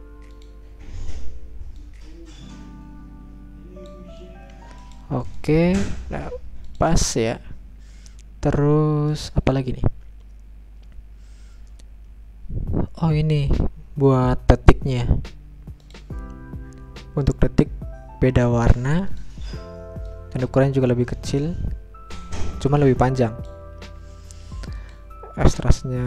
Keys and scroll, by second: 25.8-26.0 typing.